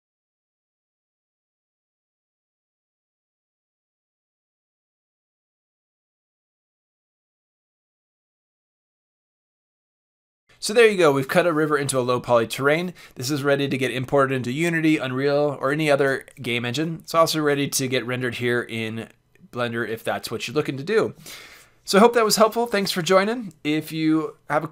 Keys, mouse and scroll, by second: 1.1 shift+s, 3.9 click, 4.2 c, 4.7 middle click, 5.2 r, 6.3-7.0 drag, 6.9 r, 7.9 click, 8.3 r, 9.7 click, 9.8 middle click, 10.0 Tab.